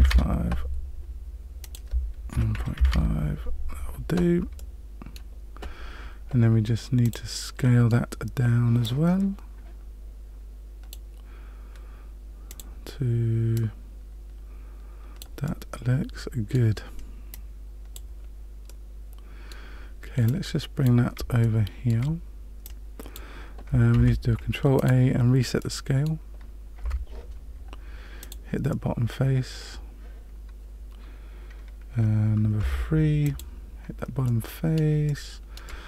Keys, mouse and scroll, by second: 1.6 click, 4.5 middle click, 7.0 click, 7.5 middle click, 8.8 click, 12.4 click, 13.5 click, 15.4 middle click, 17.3 click, 18.6 middle click, 20.2 click, 21.4 shift+middle click, 22.6 click, 23.9 ctrl+a, 25.6 middle click, 26.8 Tab, 28.2 click, 32.5 3, 33.2 click, 34.2 middle click, 35.0 shift+middle click, 35.6 middle click.